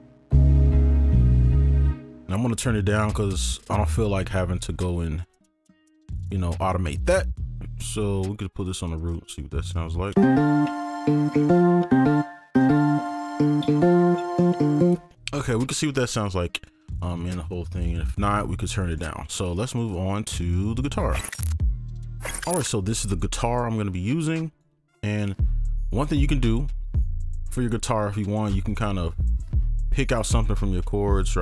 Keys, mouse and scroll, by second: 2.5-3.4 alt+scroll up 1, 4.9 ctrl+click, 5.2 shift+click, 11.8 space, 11.9 space, 12.1 ctrl+a, 12.3 alt+click, 13.1-13.5 scroll down 1, 14.9 space, 16.1 right click, 16.9 double click, 18.2 ctrl+click, 19.9 right click, 27.3-27.9 scroll up 1, 27.9-28.5 scroll down 1, 28.7 ctrl+click.